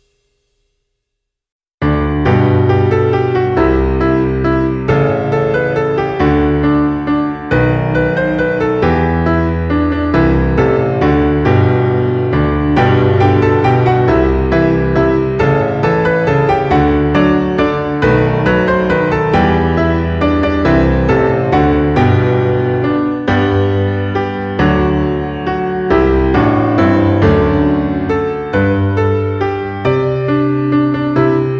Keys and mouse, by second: 0.2 g, 0.5 click, 1.7 middle click, 4.0 F6, 5.4 F6, 7.3 shift+right click, 7.8 shift+a, 10.8 click, 11.6 g, 11.8 z, 12.6 click, 13.5 KP_3, 14.4 shift+middle click, 15.0 e, 16.4 click, 16.5 e, 17.7 click, 18.2 Tab, 19.1 click, 21.2 click, 24.4 click, 28.3 click, 29.7 click, 30.9 click.